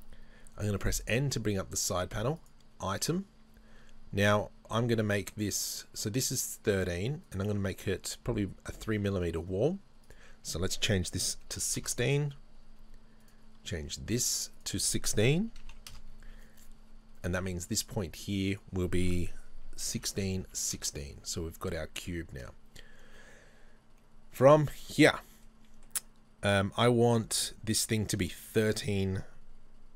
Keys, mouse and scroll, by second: 0.8 n, 2.4 click, 4.3 right click, 5.7 right click, 7.3 right click, 10.1-13.2 drag, 11.9 KP_Enter, 13.2 right click, 14.6-17.3 drag, 16.0 KP_Enter, 17.3 right click, 18.5 click, 20.1-22.0 drag, 20.9 KP_Enter, 21.7-22.0 scroll down 1, 22.0-29.9 middle drag.